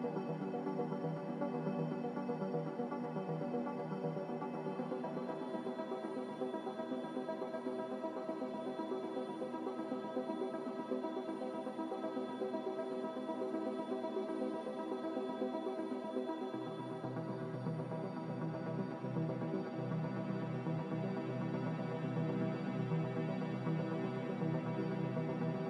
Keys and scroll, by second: 9.1 F9, 10.4 a, 19.9-20.8 typing.